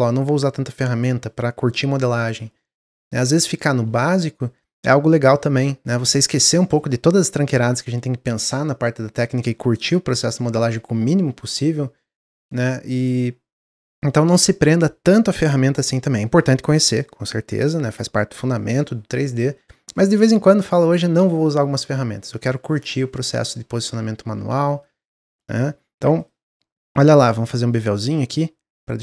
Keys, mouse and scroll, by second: 5.5-8.5 middle drag, 12.4-13.3 middle drag, 13.3-14.1 scroll up 1, 22.9-23.9 middle drag, 24.6 middle click, 24.8 Tab.